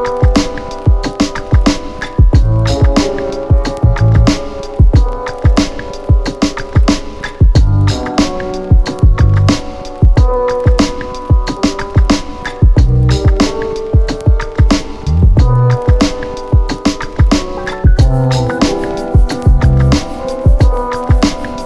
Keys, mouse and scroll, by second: 0.5 click, 3.6-10.1 click, 10.1 ctrl+z, 11.2-14.9 click, 15.0 ctrl+z, 16.4 click, 19.4 right click.